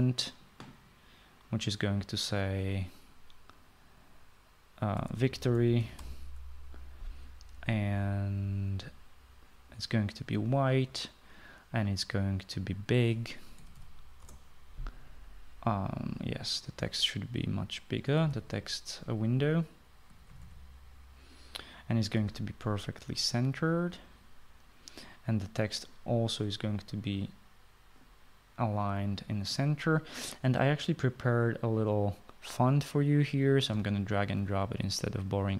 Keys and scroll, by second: 5.7-7.5 typing, 14.5-15.2 typing, 18.9-19.7 typing, 20.9-21.9 typing.